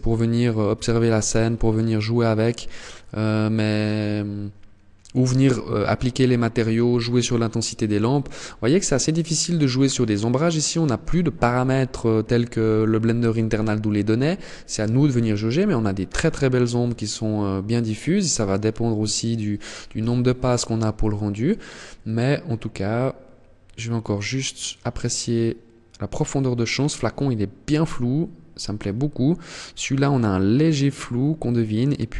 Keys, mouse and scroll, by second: 19.2 KP_0.